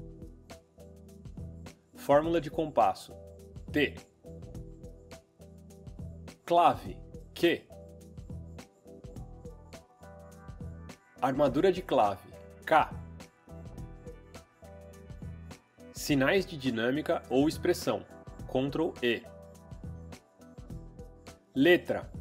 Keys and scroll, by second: 3.7 t, 8.1 q, 13.3 k, 18.3 ctrl+e.